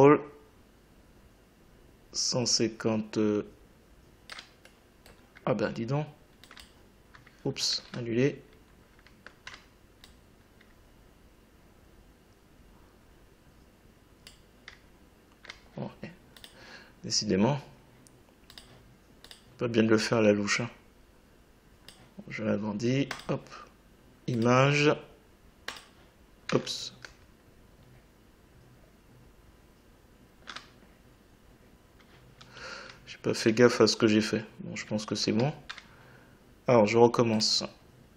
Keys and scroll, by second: 7.7 ctrl+z.